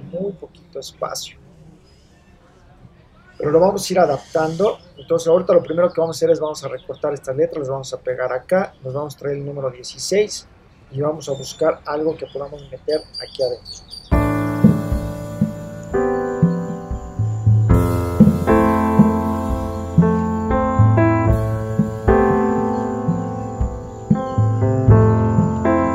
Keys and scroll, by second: 15.9 super+space, 20.6 super+c, 20.7 super+v, 20.8 space, 22.2 super+c, 22.3 super+v, 23.0 super+c, 23.1 super+v, 23.3 super+0, 24.4 v.